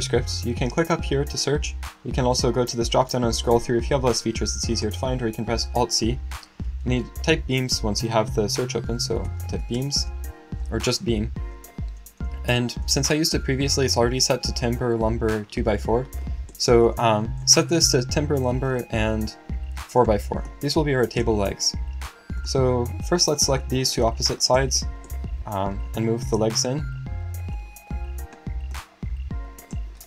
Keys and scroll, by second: 6.8 alt+c, 8.8-10.0 typing.